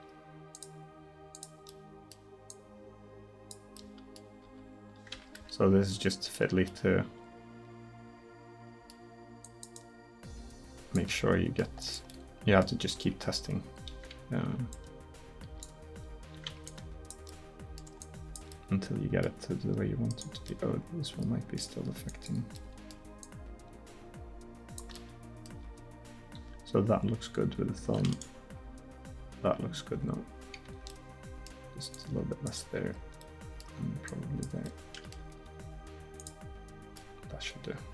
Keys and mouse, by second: 1.8 click, 4.5 r, 9.5-11.3 drag, 11.5 middle click, 12.3 middle click, 13.0 r, 14.8-16.5 drag, 15.9 r, 16.7-17.5 drag, 17.5-17.8 middle drag, 20.7 middle drag, 22.3-24.9 drag, 25.7 r, 28.7 r, 30.2-31.0 middle drag, 35.4 r.